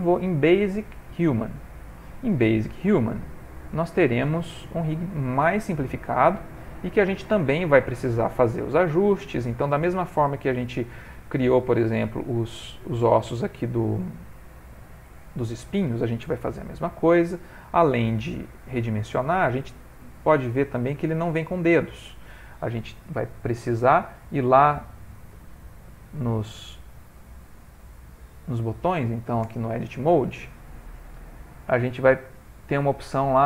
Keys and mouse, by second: 2.3 middle click, 4.6 click, 5.3 middle click, 7.8 middle click, 17.2-17.6 middle click, 17.5 middle click, 18.5 middle click, 19.5 shift+middle click, 20.0 middle click, 20.5 ctrl+middle click, 20.9 ctrl+middle click, 21.3 middle click, 25.8 click, 26.3 click, 29.0 click, 29.0 middle click, 29.5 Tab, 31.1 click, 31.6 middle click, 33.0 click.